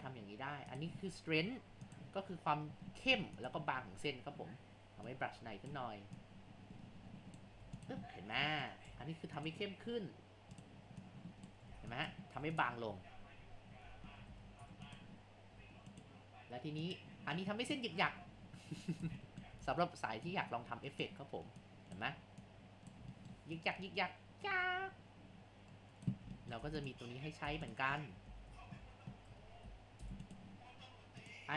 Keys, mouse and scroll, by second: 0.8 click, 1.4 Tab, 3.1 Tab, 5.1-7.6 drag, 7.6 Tab, 8.1 scroll up 1, 8.9 Tab, 10.6 click, 11.2-14.3 typing, 12.0 click, 12.4 Tab, 12.9-13.4 scroll down 4, 13.4 scroll up 1, 14.6 Tab, 15.6 2, 16.8 click, 17.8 2, 19.2 middle click, 19.7 ctrl+z, 20.2-23.2 drag, 23.2 middle click, 23.6-26.4 drag, 26.4 middle click, 26.7 Tab, 26.8 click, 27.4 Tab, 28.0-28.3 scroll down 3, 28.3 ctrl+z, 28.5 ctrl+z, 28.7 ctrl+z, 28.9 ctrl+z, 29.4 ctrl+z, 29.7 ctrl+z, 30.0 Tab, 31.2-31.5 drag.